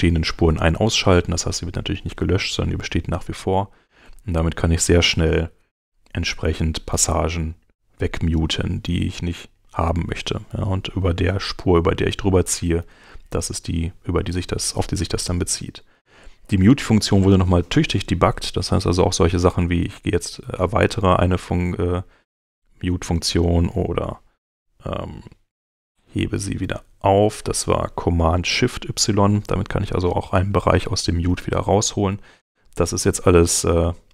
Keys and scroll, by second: 5.2 super+y, 8.6 super+y, 12.5 super+y, 20.1 super+y, 25.3 alt+super+y, 25.8 alt+shift+super+y, 27.1 shift+super+y, 31.8 shift+super+y.